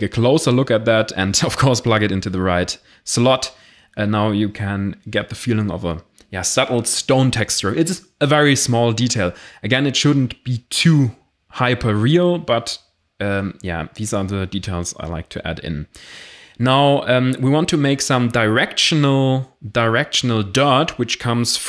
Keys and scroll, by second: 7.8 x, 7.9 shift+a, 10.5-11.7 typing, 11.2 ctrl+a, 11.9 Return, 14.9 shift+a, 17.1 s, 17.3 e, 17.5 p, 17.6 e.